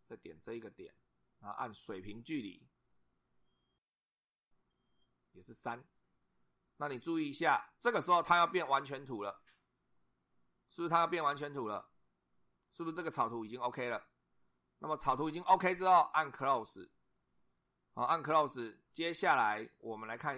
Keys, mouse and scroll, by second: 0.6 click, 4.3 click, 5.4 3, 6.3 click, 16.7 click.